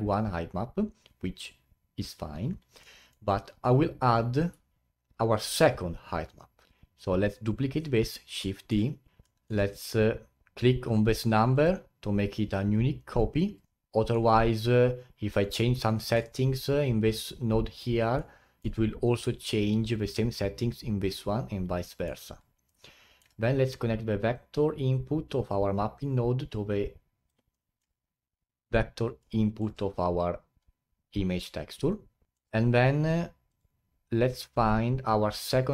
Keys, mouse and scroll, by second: 2.8 middle click, 3.5 scroll down 4, 4.1 click, 6.7 shift+d, 9.1 scroll up 9, 9.2-11.5 middle drag, 11.5-13.3 drag, 13.3-13.9 scroll down 8, 15.4-16.4 middle drag, 16.4-17.2 scroll up 6, 18.2-21.2 middle drag, 21.8 middle click, 22.1-22.7 scroll down 8, 22.7-24.3 middle drag, 24.3 click, 27.5-28.1 middle drag, 28.1-28.9 scroll up 11, 29.2-32.2 middle drag, 32.3 middle click, 32.6-33.2 scroll up 2, 33.5-35.7 drag.